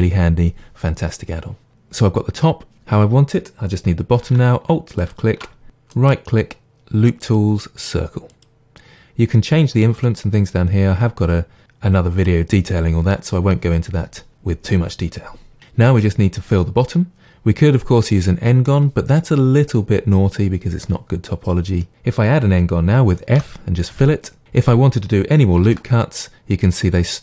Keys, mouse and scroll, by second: 5.0 alt+click, 5.9-8.4 right drag, 10.0-24.4 drag, 23.4 f, 24.4-27.2 middle drag, 25.7 ctrl+r.